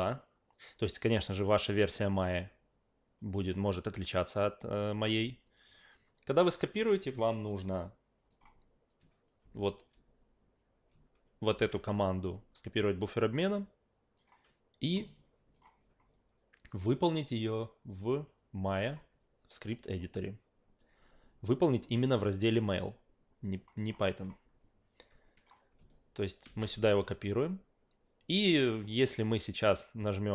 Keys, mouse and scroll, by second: 5.9 click, 8.3 click, 9.4 ctrl+a, 11.5 ctrl+c, 14.2 click, 15.5 click, 16.7 click, 19.9 click, 21.7 click, 23.8 click, 24.1 click, 25.4 click, 26.4 ctrl+v.